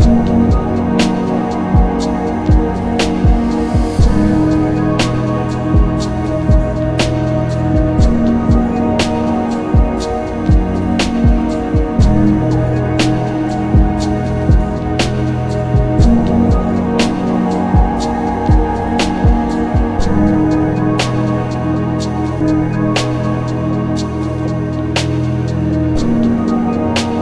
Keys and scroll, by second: 3.0 ctrl+z, 3.9 ctrl+z, 5.3 ctrl+z, 6.5 ctrl+z, 13.6 b, 13.7 s, 13.9 t, 18.1 ctrl+z, 18.4 s, 20.0 ctrl+z, 22.0 ctrl+z.